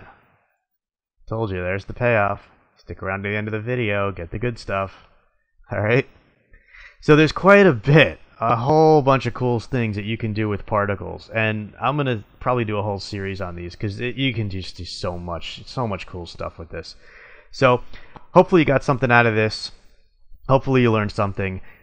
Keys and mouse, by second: 0.7-1.8 middle drag, 3.3 middle click, 4.3 middle click, 5.1 middle click, 8.2 middle click, 8.9 middle click, 9.1 middle click, 10.9 middle click.